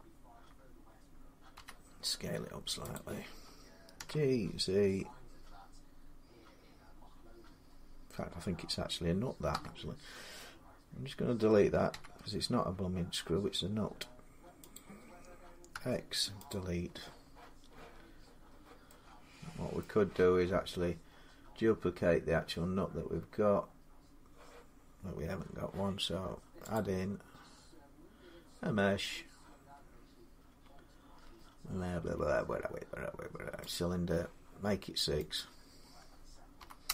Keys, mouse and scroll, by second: 1.3 s, 2.7 click, 3.3-7.8 drag, 3.8 g, 9.3 x, 11.7 x, 14.5-16.2 drag, 15.5 x, 19.6 middle click, 20.8-21.3 scroll down 4, 21.5 scroll down 3, 22.4-23.4 scroll up 1, 23.4-24.1 scroll up 2, 24.6-25.5 scroll up 3, 26.3 middle click, 26.5 click, 29.7-31.6 drag, 33.5-36.9 drag, 36.4 6, 36.6-36.9 Return.